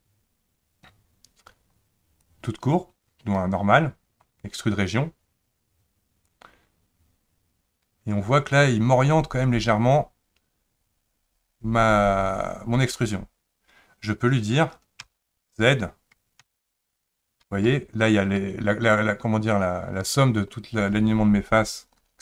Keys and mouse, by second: 2.3-3.4 drag, 6.4-22.2 drag.